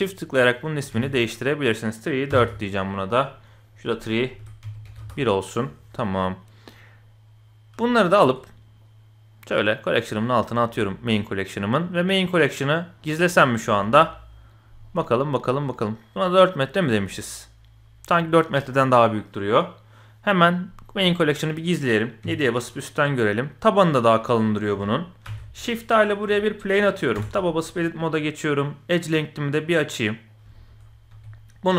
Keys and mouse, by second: 0.6 click, 0.7-2.4 drag, 3.6 click, 5.0 click, 8.0 shift+click, 8.8 click, 11.0 click, 13.0-13.4 middle drag, 14.9-15.4 middle drag, 21.4 click, 22.2 KP_7, 23.7 middle click, 25.2 shift+a, 26.4 shift+click, 27.1 Tab, 28.5-30.4 drag, 30.5 shift+click, 31.1 s.